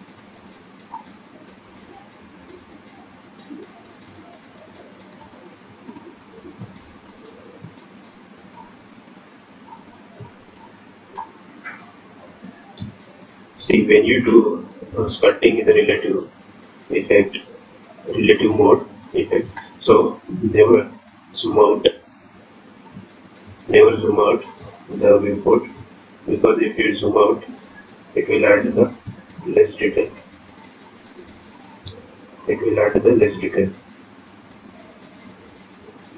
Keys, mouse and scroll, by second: 3.0 click, 3.6 click, 8.4-9.0 scroll down 4, 8.9-9.5 scroll up 4, 9.7 shift+middle click, 10.4 click, 11.1 click, 14.8 shift+click, 23.9 click, 25.6 shift+click, 32.6-33.4 scroll down 3, 33.4-33.8 scroll up 2, 34.2-34.7 scroll up 1, 35.1 shift+click.